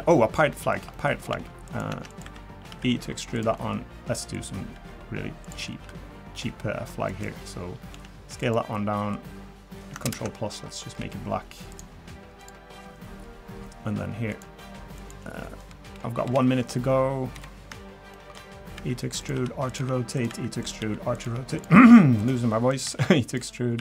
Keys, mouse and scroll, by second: 0.1 shift+middle click, 0.5 middle click, 0.7 scroll down 1, 0.9 middle click, 1.0 scroll up 3, 1.3 Tab, 1.6 click, 1.9 Tab, 2.1 click, 2.2 3, 2.7 e, 3.6 middle click, 3.7 scroll up 2, 4.3 click, 4.7 e, 5.7 s, 7.9 s, 8.7 middle click, 10.0 ctrl+KP_Add, 11.0 g, 12.4 click, 14.3 click, 15.0 click, 16.0 KP_0, 16.2 KP_1, 17.3 KP_3, 18.1 shift+middle click, 18.8-23.8 typing.